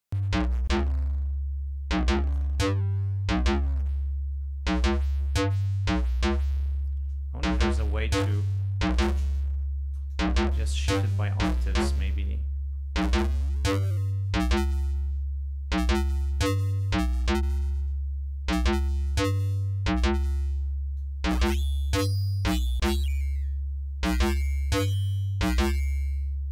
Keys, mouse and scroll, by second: 3.8-4.1 scroll up 2, 4.6 scroll up 2, 6.5 ctrl+scroll down 2, 6.9 ctrl+scroll up 2, 7.7-10.9 drag, 11.4-11.8 scroll up 2, 11.8-12.6 scroll down 2, 12.6-12.9 scroll up 2, 13.4-13.8 scroll up 2, 13.9 scroll down 2, 17.0-19.7 drag, 21.0-24.7 drag, 24.7-26.1 scroll down 6.